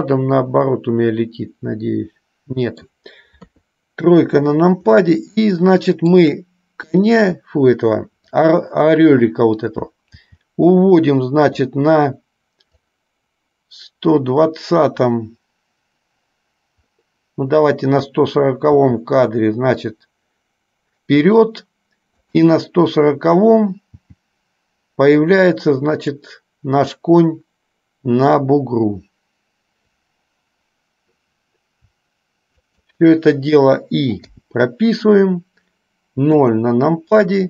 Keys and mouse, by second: 0.3-3.1 middle drag, 3.7 KP_3, 5.7 shift+middle click, 7.1 click, 10.2 g, 13.1-18.3 drag, 18.9 g, 24.2 g, 32.8 shift+click, 34.4 i, 36.4 KP_0.